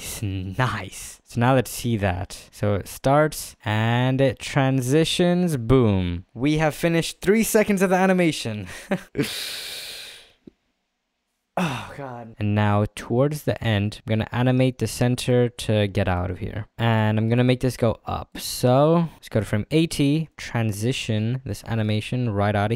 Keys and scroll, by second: 1.2 space.